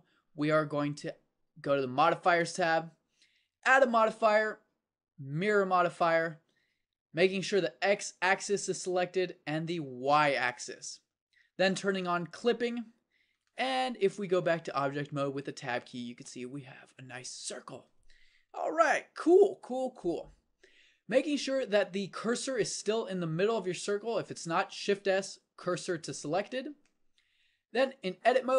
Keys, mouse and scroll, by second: 2.3-5.5 drag, 10.1-11.8 drag, 12.3-14.3 drag, 14.3 Tab, 19.2 KP_7, 24.9 shift+s.